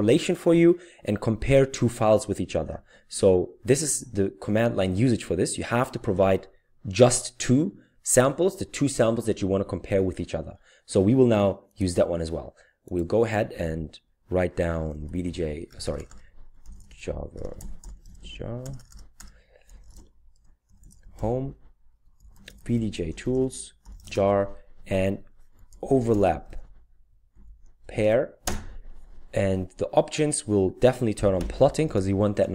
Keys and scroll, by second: 14.7-28.1 typing, 31.1-31.9 typing.